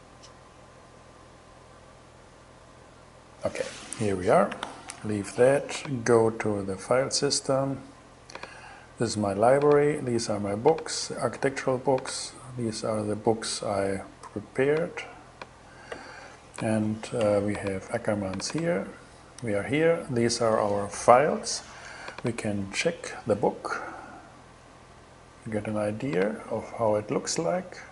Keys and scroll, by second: 4.2 super+h.